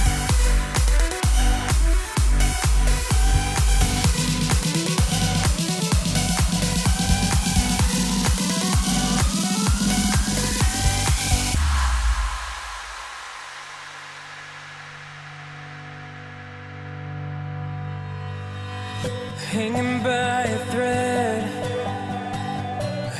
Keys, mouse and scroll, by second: 15.1-19.2 drag, 21.3 KP_0.